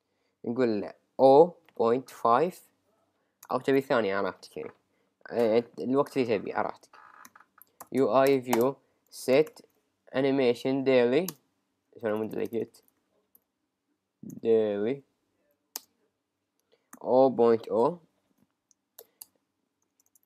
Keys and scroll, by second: 1.6 Return, 2.5 Right, 3.8 Return, 6.1 Return, 7.3 shift+u, 7.4 shift+i, 7.8 shift+v, 8.3 Return, 10.7 Up, 11.3 Return, 15.4 Up, 15.8 Return, 18.3 Right, 19.2 Return.